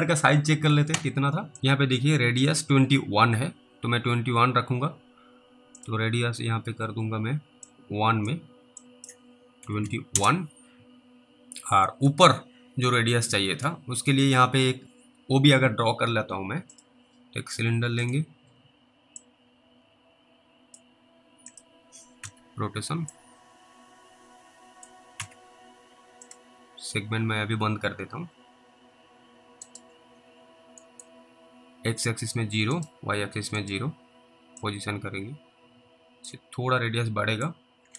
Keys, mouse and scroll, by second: 5.8 click, 7.9 click, 9.1 click, 9.6 typing, 10.1 Return, 12.1 middle click, 12.9 click, 14.0 middle click, 14.0 scroll up 2, 14.8-15.5 scroll down 3, 16.7 click, 18.7 middle click, 18.7-19.2 scroll up 1, 19.5 click, 22.2 typing, 23.4 click, 24.9-25.7 typing, 26.3 click, 29.6 click, 29.7 right click, 30.1-30.8 scroll up 3, 31.1 middle click, 32.8 right click, 34.9 click, 37.7 click.